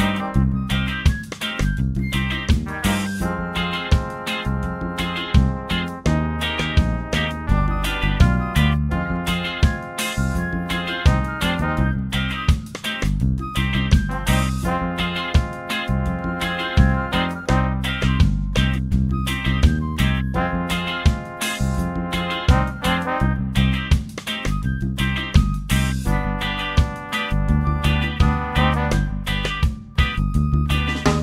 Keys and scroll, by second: 19.3 ctrl+space, 19.8 ctrl+space, 20.0 ctrl+space, 20.1 ctrl+space, 26.0 ctrl+space, 26.5 ctrl+space, 26.6 ctrl+space, 26.8 ctrl+space.